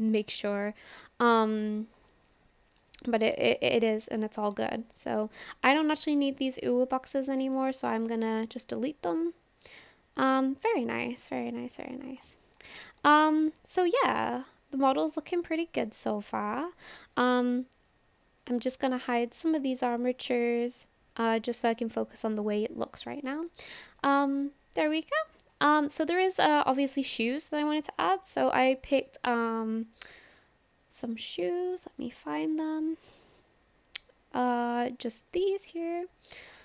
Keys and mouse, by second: 0.2-1.7 middle drag, 2.4-2.8 middle drag, 2.9 click, 3.4-3.7 shift+drag, 4.1-4.4 drag, 4.6-5.0 shift+drag, 5.2-5.6 drag, 7.4 click, 8.4 typing, 9.1 click, 10.3 click, 10.6-11.1 middle drag, 13.2-13.5 shift+middle drag, 13.7-14.0 middle drag, 14.2 shift+middle drag, 14.5-15.0 middle drag, 17.1 click, 19.9 click, 21.2-22.0 drag, 23.5-23.8 shift+middle drag, 24.0-25.4 middle drag, 25.8 shift+middle click, 26.7 shift+middle click, 27.8-28.8 drag.